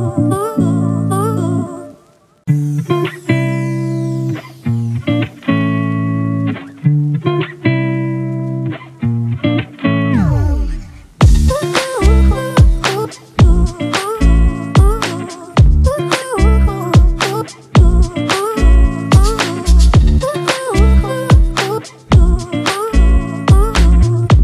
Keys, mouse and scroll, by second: 17.4 alt+click.